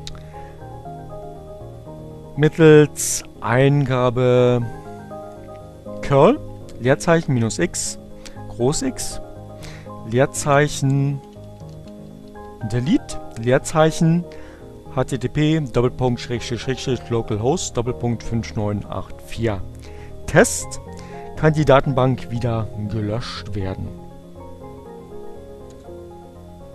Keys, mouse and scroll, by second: 2.5 Up, 4.4 Left, 7.6 Left, 8.0 Right, 9.6-12.2 typing, 22.9 Return, 25.5 Up.